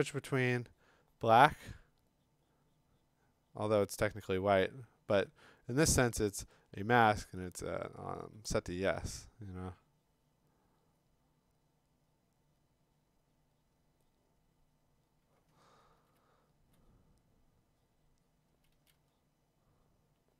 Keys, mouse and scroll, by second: 0.1 x, 5.1 x, 8.2 x, 16.0 [, 16.2 [, 16.7 [, 16.8 [, 18.5 [, 18.7 [, 18.9 [.